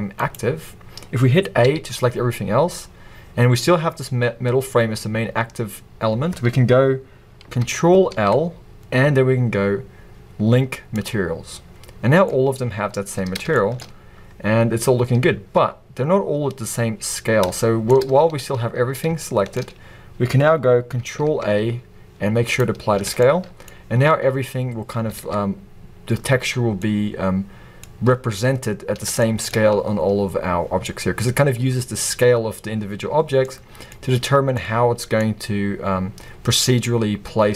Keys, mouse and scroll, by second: 0.3 right click, 0.6-1.5 scroll down 2, 1.5 scroll down 1, 1.7 a, 2.9-4.8 scroll up 2, 4.8-5.6 scroll up 1, 5.6 scroll up 1, 5.8-6.5 scroll down 2, 6.5-7.3 scroll down 1, 7.3-8.1 scroll down 1, 8.1-9.8 scroll down 1, 9.8-10.6 scroll down 1, 10.6-11.1 scroll down 1, 11.1 ctrl+l, 11.9-12.3 scroll down 2, 12.3-13.1 middle drag, 13.1-13.6 scroll up 2, 13.6-14.0 shift+middle drag, 14.0-14.8 scroll up 2, 14.8-37.5 middle drag, 15.0 scroll down 1, 16.5-17.3 scroll up 1, 18.1 scroll down 1, 19.7 scroll up 1, 22.7 ctrl+a, 24.1-24.7 scroll up 1, 24.7 scroll down 1, 25.2 alt+a, 25.4 scroll down 1, 28.1 scroll up 1, 30.7-31.5 scroll down 1, 31.7-32.3 scroll up 1, 34.2-35.4 scroll up 1.